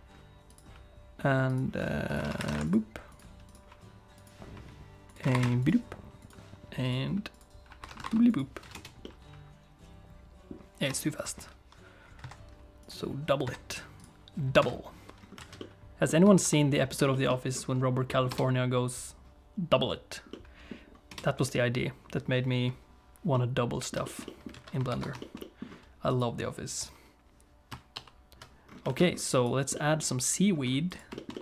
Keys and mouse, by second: 0.5 click, 1.5 click, 2.1 click, 3.1 click, 3.5 click, 5.1 click, 6.2 click, 6.8 click, 7.3-8.5 drag, 8.7 space, 9.0-10.5 middle drag, 10.9 space, 11.2 click, 12.2 click, 12.8 click, 13.4 click, 14.0 click, 14.6 click, 15.4 alt+a, 15.6 middle click, 16.4 ctrl+s, 17.1 shift+middle click, 18.1 middle click, 18.3 space, 20.3 middle click, 21.1 space, 23.3 middle click, 24.0 shift+middle click, 24.2 middle click, 24.5 alt+a, 24.9 ctrl+s, 25.2 shift+click, 25.4 middle click, 26.1 click, 28.0 alt+h, 28.9 alt+a, 29.0 middle click, 29.4 click, 29.7 middle click, 30.6 middle click, 31.1 shift+click, 31.2 shift+click, 31.3 middle click.